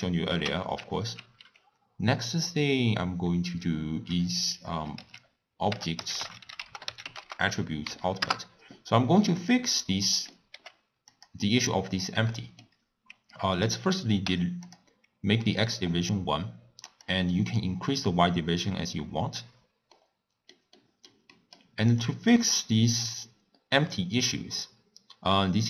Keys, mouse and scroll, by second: 8.4 t, 14.6 click, 17.2-20.0 drag, 20.0-23.0 middle drag, 23.0 click, 24.2 click.